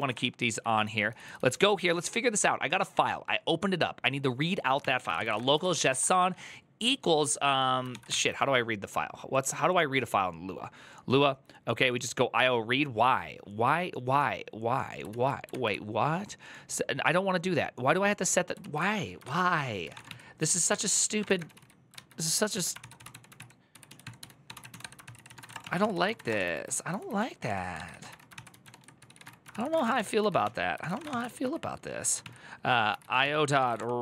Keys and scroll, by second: 0.0-2.6 typing, 4.3-6.3 typing, 7.4-8.4 typing, 15.0 alt+{, 18.4 alt+{, 19.0 ctrl+c, 19.4-34.0 typing, 22.3 alt+{.